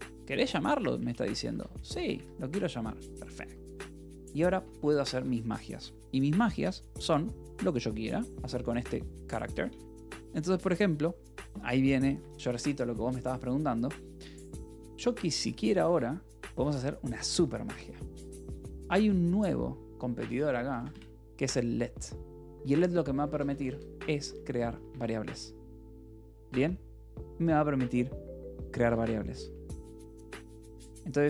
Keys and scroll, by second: 0.6 h, 1.4 a, 2.0 Escape, 2.9 l, 3.4 a, 3.7 Escape, 4.9 a, 5.1 Tab, 12.7 Escape, 12.8 k, 13.6 j, 14.1 o, 15.2 BackSpace, 15.7 Escape, 15.9 k, 16.9 shift+o, 18.2-20.8 typing, 23.0-25.1 typing, 24.8 Escape, 26.2 l, 26.7 h, 28.2-31.2 typing.